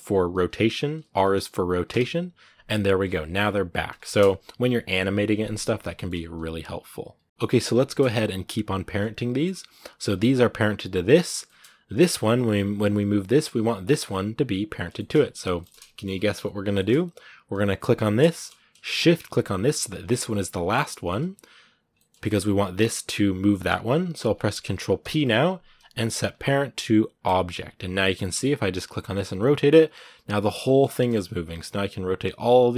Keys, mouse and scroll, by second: 1.7 alt+r, 2.9 middle click, 3.4-3.9 scroll down 2, 3.9-5.9 shift+middle drag, 5.9-7.2 scroll up 1, 7.2 right click, 7.6 shift+middle click, 8.5-9.1 scroll up 2, 9.1 shift+middle click, 9.9 shift+right click, 11.2 shift+middle click, 11.4 scroll down 2, 11.8 right click, 13.6 right click, 14.7 shift+middle click, 14.9-15.3 scroll up 1, 15.3 middle click, 16.1 scroll down 1, 16.3 a, 16.6-17.6 shift+middle drag, 17.6 right click, 17.9-18.3 scroll down 3, 18.1 shift+middle click, 19.8 shift+right click, 20.7 shift+middle click, 21.1-21.8 scroll up 1, 21.8-27.1 shift+middle drag, 27.1 ctrl+p, 27.6 right click, 27.9 middle click, 28.8 r, 30.4 shift+middle click, 31.2 right click, 31.4 r, 32.4 right click, 32.5 r.